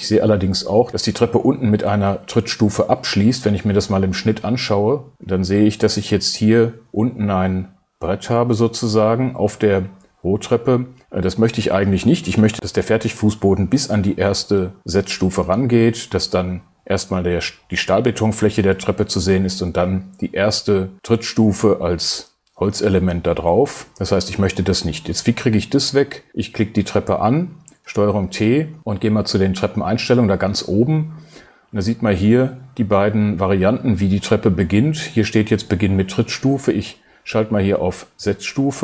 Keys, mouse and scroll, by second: 1.8-5.1 drag, 5.9 click.